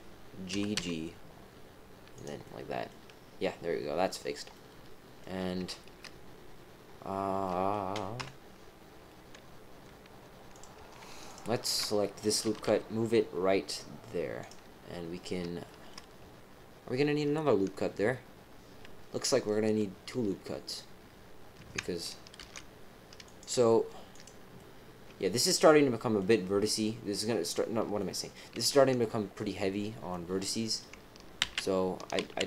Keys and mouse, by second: 0.5 g, 2.4 middle click, 4.5 middle click, 7.4 middle click, 8.1 KP_7, 10.5 click, 11.2 alt+shift+click, 12.4 g, 15.6 shift+middle click, 22.3 ctrl+r, 24.5-26.2 middle drag, 27.9 middle click, 30.1 middle click, 31.4 ctrl+z, 32.2 ctrl+z.